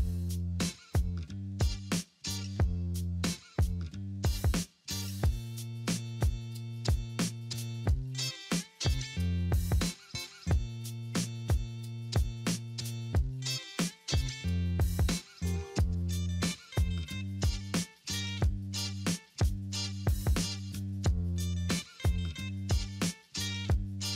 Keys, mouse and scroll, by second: 6.5 scroll up 1, 9.3 alt+middle click, 9.8 alt+middle click, 13.3 alt+middle click, 13.5 alt+middle click, 17.2 alt+middle click, 21.8 alt+middle click.